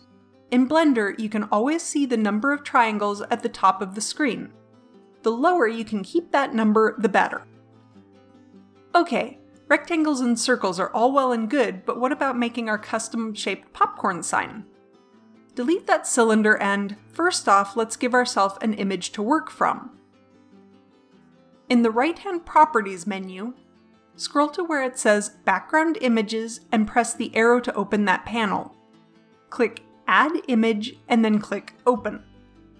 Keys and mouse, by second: 15.6 right click, 16.2 Delete, 27.4-30.7 drag, 32.7 click.